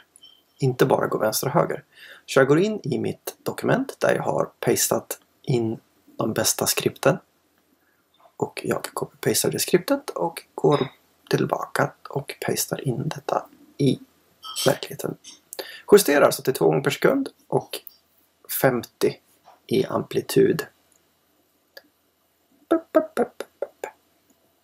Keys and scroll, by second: 1.6 super+Tab, 8.1 super+c, 10.5 super+v.